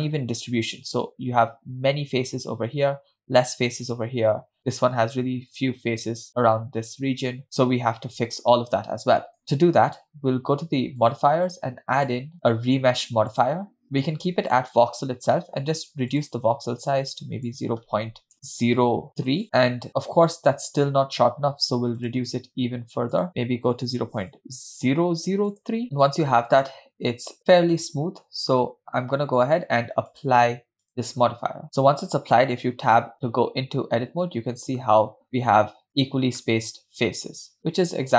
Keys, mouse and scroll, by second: 9.7 Tab, 11.1 click, 12.1-13.7 drag, 16.2-19.4 drag, 18.3 BackSpace, 20.3 scroll up 4, 20.4-20.9 scroll down 1, 22.1-25.8 drag, 25.9-26.7 scroll down 1, 26.7 scroll down 2, 26.8 scroll up 2, 27.9 scroll up 1, 28.6 scroll down 1, 30.1-31.6 drag, 33.3 Tab, 34.0-34.6 scroll down 3, 34.6-35.4 scroll up 7, 35.6 scroll down 1, 35.9 shift+middle click, 37.1-38.1 scroll down 4.